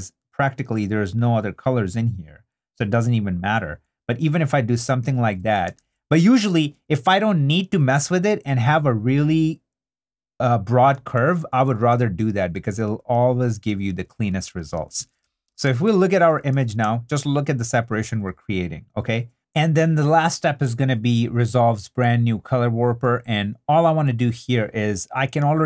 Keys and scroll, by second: 4.7 super+d, 5.7 super+z, 11.1 super+d, 15.0 super+i, 15.6 super+i, 15.8 super+d, 16.5 super+2, 17.6 super+2.